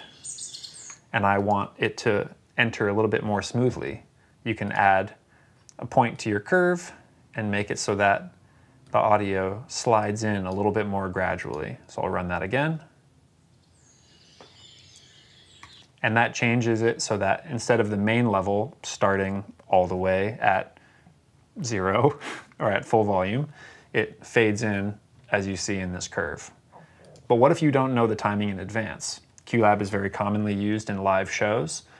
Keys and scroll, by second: 0.5 s, 12.6 v, 15.5 s.